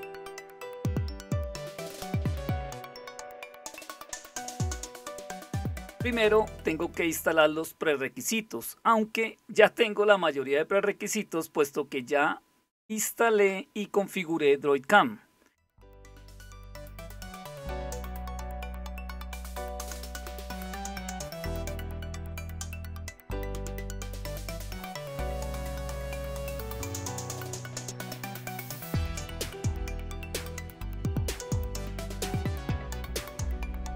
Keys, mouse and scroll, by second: 0.7-1.9 scroll down 1, 1.9-4.0 scroll down 1, 4.0 click, 8.4-9.6 scroll down 2, 9.6-13.3 scroll down 1, 13.3-16.1 scroll down 1, 16.1-24.1 drag, 26.4 click, 27.8-29.1 typing, 30.7 super+7, 32.9 ctrl+super+Down, 33.7 super+Return.